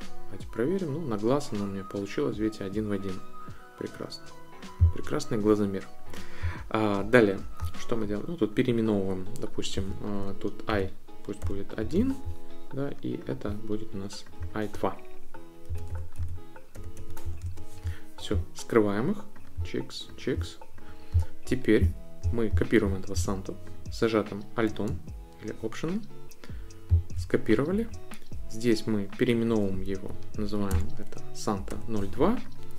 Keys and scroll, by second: 9.7-12.4 typing, 15.4-17.7 typing, 29.9 Right, 30.7-32.4 typing.